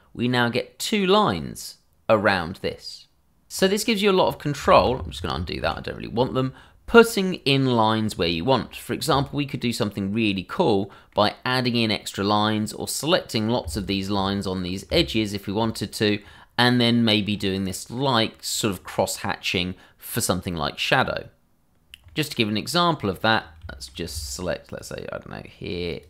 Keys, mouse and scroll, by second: 3.5 ctrl+z, 3.7 click, 4.7 ctrl+z, 6.5-7.3 scroll down 1, 8.3 shift+middle click, 8.3 middle click, 8.4 shift+middle click, 9.0 middle click, 9.9-10.5 scroll down 1, 10.5-10.9 scroll up 1, 10.9 middle click, 13.7 alt+click, 13.8 click, 15.1 alt+click, 15.6 click, 16.0 scroll down 1, 16.3 middle click, 17.3 scroll up 1, 17.7 middle click, 18.7 scroll down 1, 19.0 middle click, 22.0 scroll down 1, 22.2 middle click, 23.2-23.8 scroll up 2, 23.8 shift+middle click, 25.9 alt+shift+click, 25.9 click.